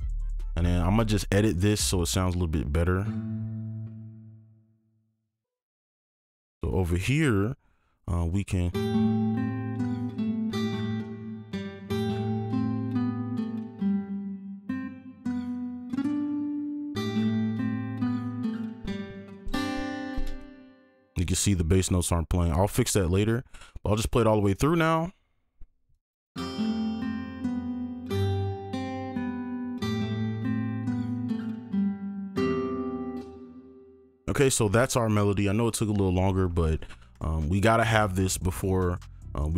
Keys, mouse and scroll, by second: 5.4-5.9 scroll up 1, 8.7 space, 10.0 space, 14.0 space, 18.8 alt+click, 22.8 alt+click, 24.8 double click, 26.3-28.3 scroll up 1, 29.3 ctrl+click, 31.0 click, 33.6 space, 37.1 right click, 37.8 ctrl+click, 38.9-39.5 scroll down 1.